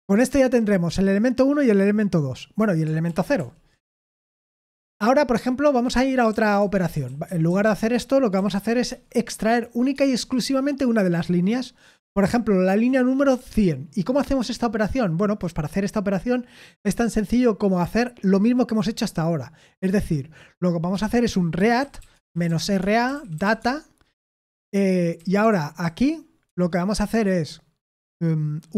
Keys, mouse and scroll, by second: 3.1 ctrl+p, 3.4 ctrl+p, 4.0 Return, 6.3-8.9 typing, 7.1 ctrl+v, 9.9 space, 10.2 Escape, 12.3-13.2 typing, 16.8 o, 21.3-23.9 typing, 25.2-26.5 typing.